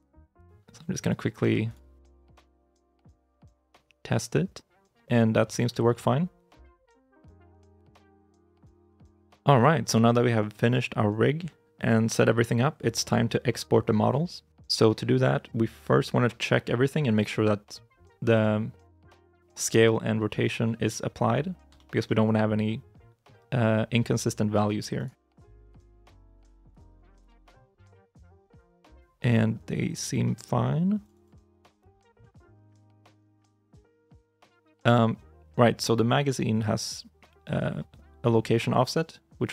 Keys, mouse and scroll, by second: 0.4 r, 1.2 g, 2.1 middle click, 2.7 right click, 3.0 scroll down 1, 3.2 r, 5.6 ctrl+z, 7.0 a, 7.6 alt+g, 7.9 alt+r, 17.0 right click, 21.6 shift+middle click, 24.8 right click, 27.9 middle click, 31.0 double click.